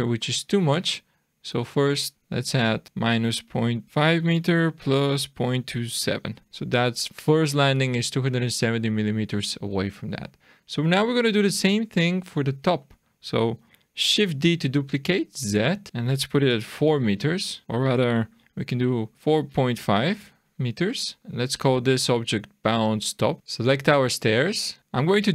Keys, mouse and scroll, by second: 1.7 click, 9.8-10.7 scroll down 5, 10.9 click, 12.8 middle click, 14.3 shift+d, 21.2 click, 21.4 click, 21.9 click, 22.1 click, 23.4 click.